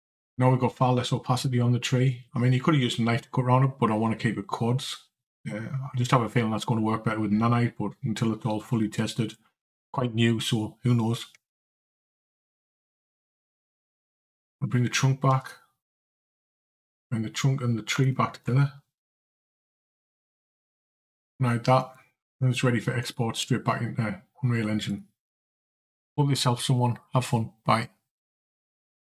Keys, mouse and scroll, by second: 13.9 click, 15.3 Tab, 15.6 click, 17.8 shift+click, 19.1 ctrl+j, 21.0 click, 21.6 click, 22.2 shift+click, 22.8 shift+click, 24.7 click.